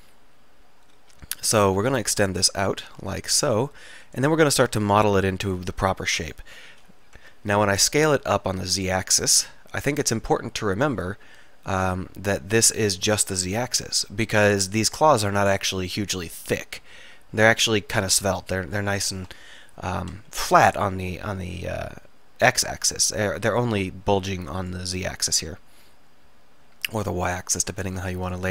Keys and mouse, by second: 1.7 e, 4.9-7.2 drag, 5.7 ctrl+r, 6.8 s, 11.1-13.0 drag, 13.0-15.6 middle drag, 19.4 KP_1, 20.5 KP_3, 21.2 s, 23.9 s, 25.7-27.2 middle drag, 27.5-28.5 middle drag.